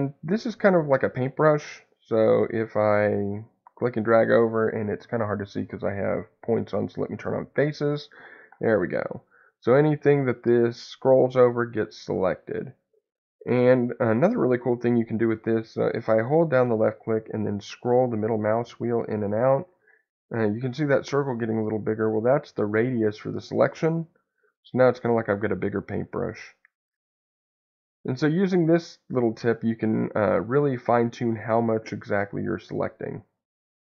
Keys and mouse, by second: 1.3-2.9 drag, 3.1-5.3 drag, 7.5-12.1 drag, 12.8 click, 13.5-32.3 drag.